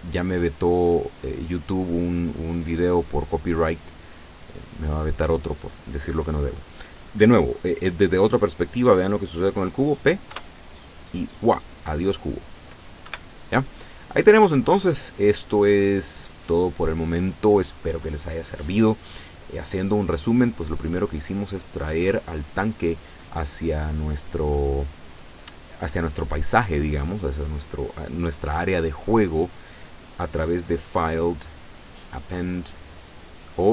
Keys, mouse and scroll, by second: 0.2-1.8 middle drag, 1.9 scroll down 2, 2.3-4.3 middle drag, 4.5 scroll up 2, 5.2 scroll up 2, 10.3 p, 13.2 Escape, 14.8-16.4 middle drag, 16.8 scroll down 2, 21.1 right click, 30.7 click.